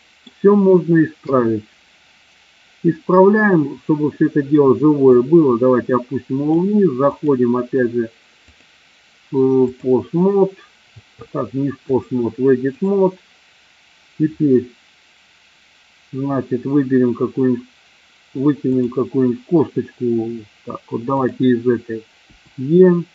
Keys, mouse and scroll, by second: 1.0 KP_3, 5.2-6.6 drag, 8.4-9.8 drag, 11.9 click, 18.6 click, 21.2 click, 22.2 e.